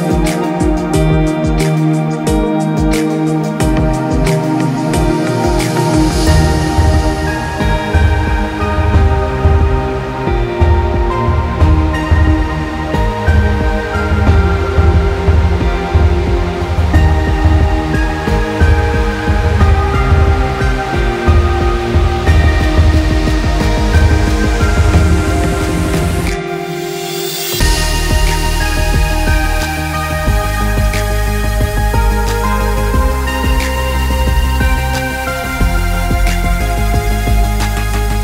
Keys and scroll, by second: 9.2 ctrl+space.